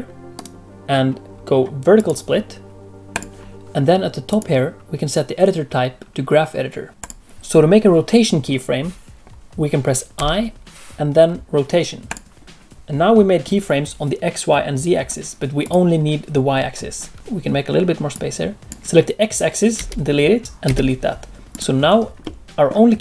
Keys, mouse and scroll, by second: 0.3 right click, 4.2 click, 7.1 ctrl+z, 10.1 i, 12.5 scroll down 1, 12.6 middle click, 15.6 click, 18.1 click, 19.7 x, 20.4 click, 20.6 x, 21.5 click, 22.2 middle click.